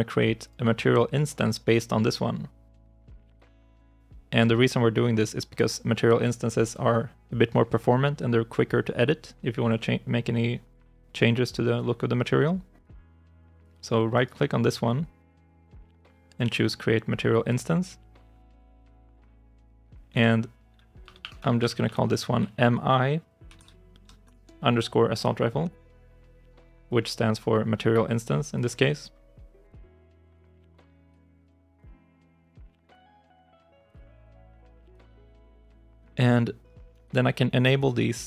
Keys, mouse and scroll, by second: 14.0 right click, 20.0 right click, 20.9 BackSpace, 22.2 click, 23.4 Right, 24.1 shift+i, 25.5 Return, 29.8 double click, 32.1 ctrl+shift+s, 35.3 scroll down 1.